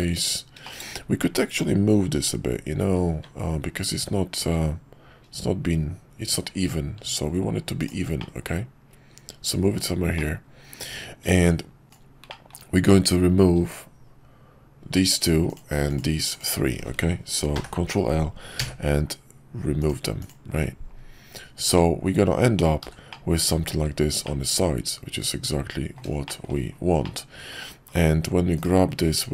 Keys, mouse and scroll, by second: 0.6 shift+middle drag, 8.3-9.8 middle drag, 10.1 middle click, 11.3 Tab, 12.2 middle click, 17.5 ctrl+l, 18.5 x, 21.6 Tab, 22.8 h, 23.1-23.8 middle drag, 24.2-26.0 middle drag, 26.2 shift+middle drag, 27.0-27.6 middle drag.